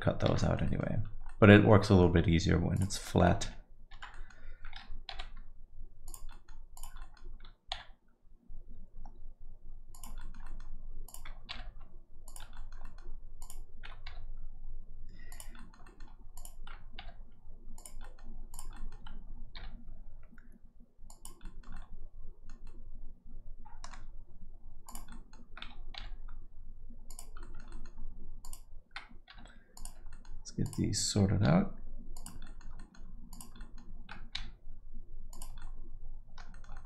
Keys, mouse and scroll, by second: 0.2 shift+z, 0.4 middle click, 0.6 alt+middle click, 1.1 scroll up 1, 1.3 alt+middle click, 2.2-2.7 scroll up 2, 2.7 click, 3.0 alt+middle click, 3.5 shift+z, 3.9 shift+z, 5.1 g, 6.3 middle click, 6.7 click, 7.0 alt+middle click, 7.7 g, 10.2 alt+middle click, 11.0 click, 11.5 g, 12.5 alt+middle click, 12.8 middle click, 13.4 click, 14.1 g, 15.6 middle click, 15.8 alt+middle click, 16.3 click, 17.2 g, 18.0 middle click, 18.5 click, 18.7 alt+middle click, 19.6 g, 21.4 middle click, 21.7 middle click, 22.6 middle click, 24.8 click, 25.1 middle click, 26.0 g, 27.4 middle click, 27.7 alt+middle click, 28.4 click, 29.3 g, 30.1 middle click, 30.6 click, 31.4 g, 32.4 middle click, 32.8 alt+middle click, 33.3 click, 33.6 alt+middle click, 34.3 g, 35.6 alt+middle click, 36.5 middle click, 36.7 alt+middle click.